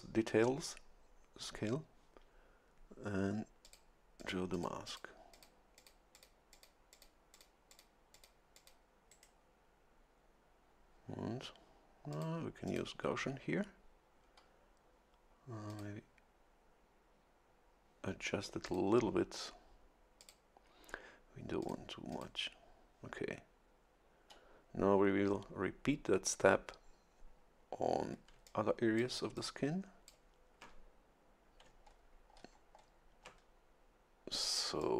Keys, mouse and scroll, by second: 3.6 click, 4.2 click, 4.5 click, 5.3 click, 5.8 click, 6.1 click, 6.5 click, 6.8 middle click, 6.9 click, 7.2 middle click, 7.3 click, 7.6 middle click, 7.7 click, 8.0 middle click, 8.1 click, 8.4 middle click, 8.5 click, 9.1 right click, 12.1 click, 12.7 click, 15.7 click, 18.6 click, 20.2 click, 21.6 click, 22.1 click, 28.3 a, 28.4 click, 29.4 click, 31.7 a, 31.8-33.0 scroll down 3, 34.8 click.